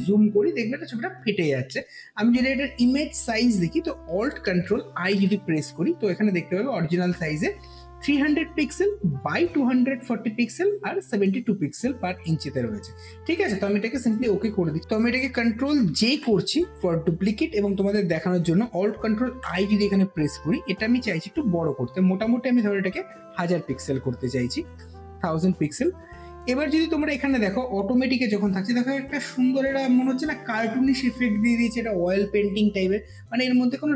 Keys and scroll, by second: 4.8 ctrl+alt+i, 15.8 ctrl+j, 19.1 ctrl+alt+i, 23.0 KP_1, 23.3 KP_0, 24.5 KP_0.